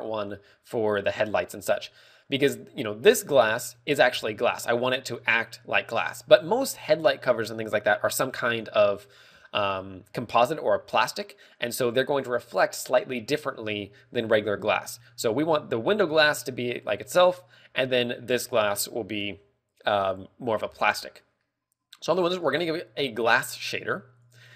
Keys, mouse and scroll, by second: 4.0 z, 4.7 z, 10.1 shift+middle click, 11.5 shift+middle click, 12.7 click, 22.9 click.